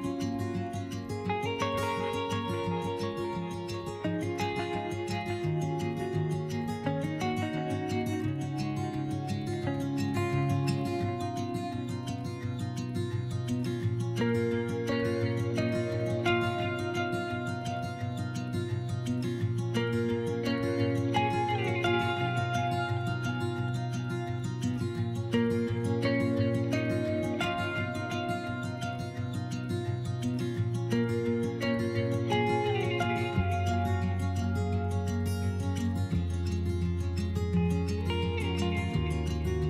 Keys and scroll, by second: 3.6 s, 6.8 s, 15.6 s, 18.9 s, 26.4 s, 37.1 1, 37.4 s.